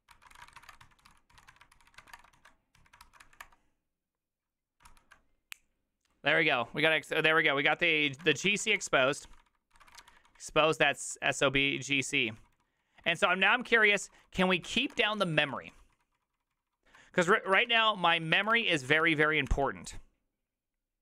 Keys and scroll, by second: 0.0-2.8 typing, 3.0 ctrl+c, 3.2 Up, 3.4 Return, 4.9 ctrl+c, 8.1-10.4 typing, 9.2 ctrl+d, 9.5 ctrl+d, 10.9 ctrl+d, 11.4 ctrl+d, 11.4 ctrl+u, 11.7 ctrl+u, 11.9 ctrl+u, 12.4 ctrl+u, 13.0 ctrl+u, 13.0 ctrl+d, 13.1 ctrl+d, 13.3 ctrl+d, 13.7-14.9 typing, 14.7 ctrl+c, 14.9 Return, 15.0 ctrl+u, 15.2 ctrl+u, 15.5 ctrl+u, 16.7 ctrl+u, 17.6 ctrl+c, 17.7-19.0 typing, 18.4 Return, 18.5 Return, 18.8 ctrl+a, 19.5 Up.